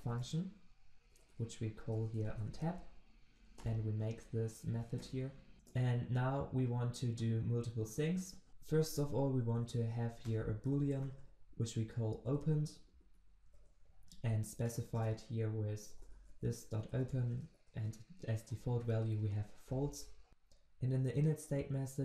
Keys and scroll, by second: 5.2 alt+Return, 17.0 Return.